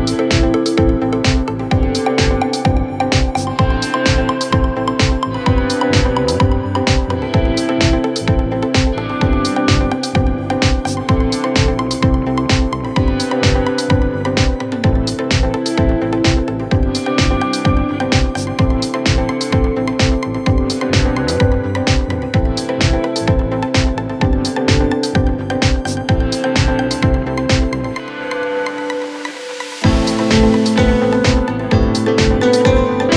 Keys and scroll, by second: 20.3 g, 29.0 Delete.